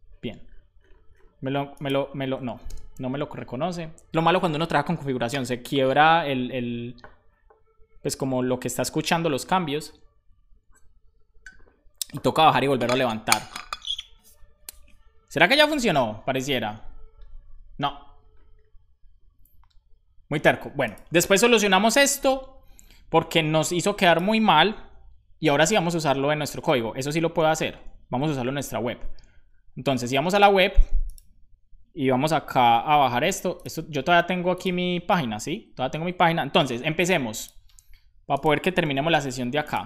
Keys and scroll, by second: 2.1 ctrl+c, 2.6 Return, 26.4 super+j, 27.3 super+j, 28.2 super+b, 32.6 super+b.